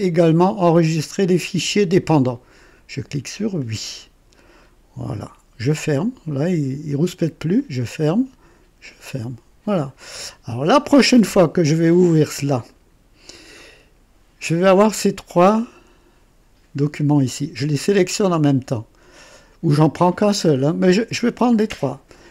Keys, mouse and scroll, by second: 3.5 click, 5.9 click, 7.5 click, 8.7 click, 12.6 click, 22.0-22.3 drag.